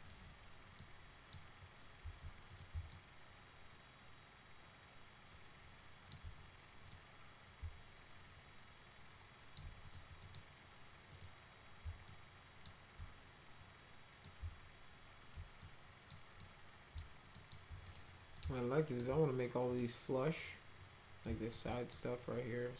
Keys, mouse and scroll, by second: 0.8 middle click, 2.5 click, 2.9-6.1 alt+middle drag, 6.9-9.6 middle drag, 9.9 click, 10.2 middle click, 11.1 click, 12.1 alt+middle click, 14.3-15.3 alt+middle drag, 15.6 middle click, 16.4 middle click, 17.4 alt+middle click, 17.9 click, 18.4 alt+middle click, 19.7 click, 21.3 alt+middle click, 21.7 middle click.